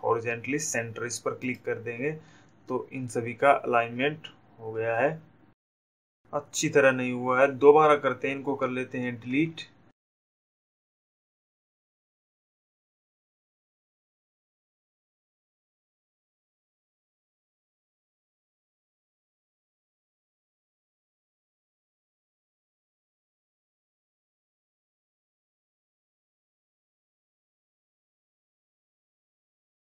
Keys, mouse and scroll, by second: 2.5 click, 9.9 Delete, 10.9 click, 13.0 click, 16.5 click, 17.7 click, 18.5 click, 19.1 shift+click, 21.4 click, 23.3 click, 24.1 click, 26.5 click, 28.5 click, 29.8 click.